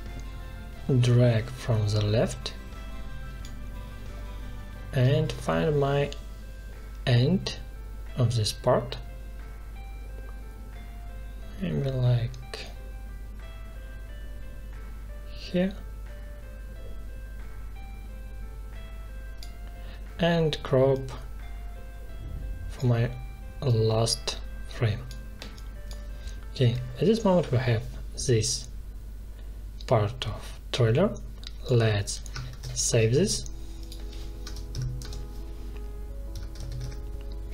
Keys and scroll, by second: 32.4 ctrl+shift+s, 34.4 space, 34.9 space, 36.0-37.2 typing.